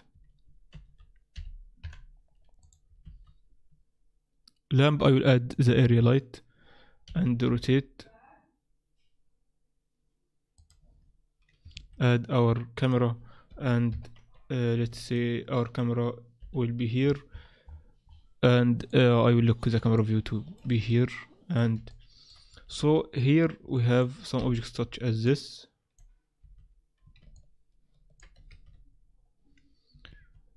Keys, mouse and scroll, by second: 0.7 shift+a, 2.6 click, 2.6 KP_1, 3.0 shift+a, 7.0 r, 11.7 shift+a, 13.9 ctrl+alt+KP_0, 15.1 shift+middle click, 16.4 n, 17.1-18.9 scroll up 27, 18.9 click, 19.1 n, 19.9 shift+middle click, 20.9 ctrl+middle click, 21.9 shift+middle click, 22.7 shift+z, 23.7 middle click, 24.3 Escape, 24.8 z, 25.2 middle click, 26.4 z, 27.3 ctrl+middle click, 28.5 shift+z, 30.0 z, 30.1 z.